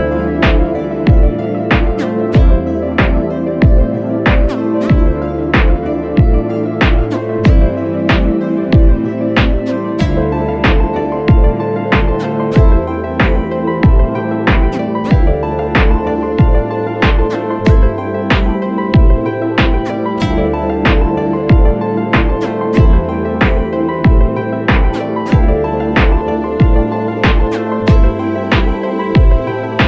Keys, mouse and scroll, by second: 1.6 ctrl+t, 4.1 alt+shift+click, 4.5 ctrl+t, 4.8 alt+shift+click, 10.1 ctrl+t, 10.5 alt+shift+click, 13.3 ctrl+t, 13.9 alt+shift+click, 18.4 Return, 23.4 ctrl+click, 24.3 ctrl+click, 24.8 ctrl+click, 25.2 ctrl+click, 25.7 ctrl+click, 27.1 Return, 29.6 ctrl+click.